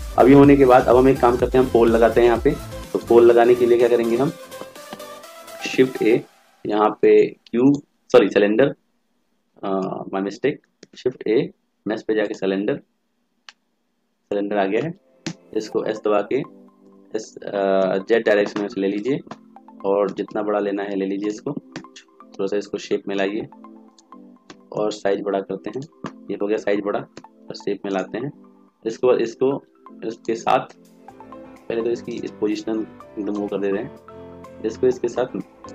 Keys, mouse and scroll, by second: 5.7 shift+a, 10.0 ctrl+z, 10.9 shift+a, 15.3 s.